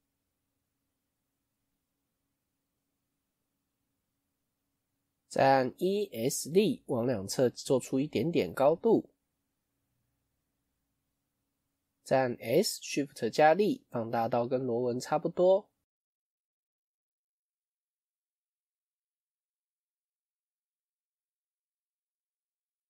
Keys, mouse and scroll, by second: 1.3-4.1 middle drag, 4.1 KP_1, 9.4-9.9 scroll up 1, 9.9 shift+middle click, 10.5-10.8 scroll up 1, 10.8-14.0 shift+middle drag, 14.0 s, 18.6-19.1 scroll up 1, 19.1-19.5 scroll down 1, 19.5 shift+middle click, 19.9-20.3 scroll up 4, 20.3-22.3 shift+middle drag, 22.3 s.